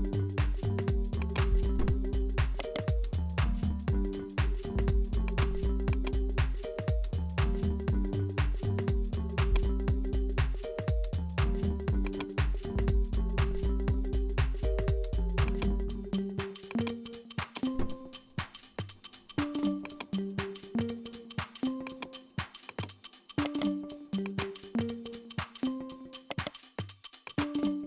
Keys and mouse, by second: 0.1-1.2 drag, 2.1 3, 2.6 right click, 3.6 ctrl+b, 5.9 click, 7.3-9.5 drag, 10.5 Tab, 12.0 click, 15.5 click, 16.3 w, 17.4 click, 18.3-19.9 drag, 20.8-21.9 drag, 22.6 click, 23.5 right click, 24.2 click, 26.3 right click, 27.3 click.